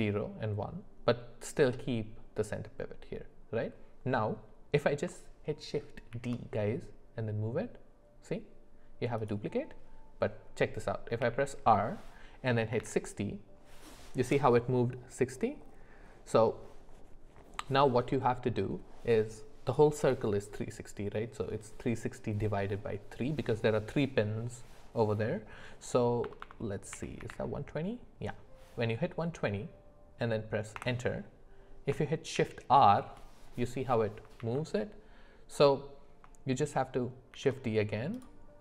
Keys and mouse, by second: 6.1 shift+d, 11.2 r, 32.3 shift+r, 34.4 ctrl+z, 37.3 shift+d.